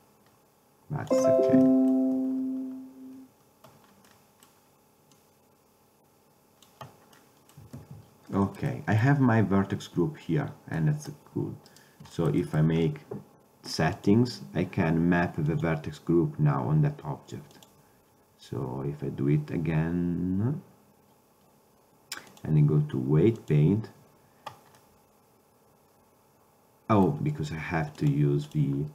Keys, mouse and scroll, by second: 1.8-3.3 middle drag, 4.2-5.3 middle drag, 5.3-7.0 drag, 7.3-7.9 middle drag, 7.9 ctrl+Tab, 14.1-14.4 drag, 25.0-26.1 middle drag.